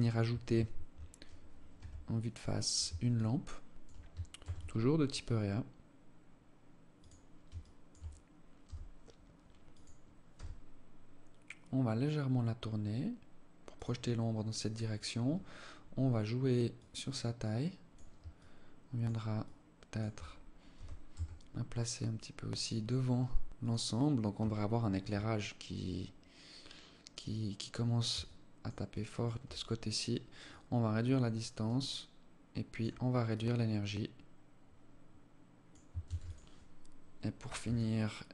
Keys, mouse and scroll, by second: 1.2 KP_1, 1.8-2.5 scroll down 2, 2.5 alt+shift+click, 3.8 shift+a, 7.0 alt+shift+click, 8.0 g, 9.8 r, 16.1 click, 17.8 alt+click, 18.8 alt+click, 20.1 g, 23.9 alt+click, 27.6 alt+click, 28.3 alt+click, 29.8 click, 32.7 click, 35.4 ctrl+s, 37.1 alt+click, 38.1 alt+click.